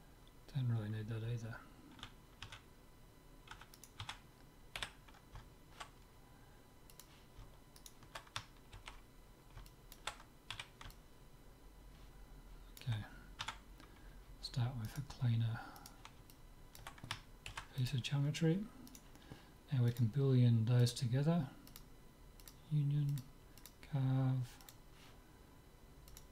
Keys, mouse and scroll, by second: 2.0 Tab, 2.6 Tab, 3.7 Tab, 3.9-5.8 right drag, 4.1 Tab, 4.9 z, 7.0-8.8 drag, 7.8-9.6 right drag, 9.0 ctrl+x, 9.7-12.9 middle drag, 10.6 z, 13.5 Tab, 14.9-17.6 right drag, 16.3-17.6 drag, 17.6 ctrl+s, 17.6 middle click, 18.9-21.0 right drag, 19.9-26.3 drag.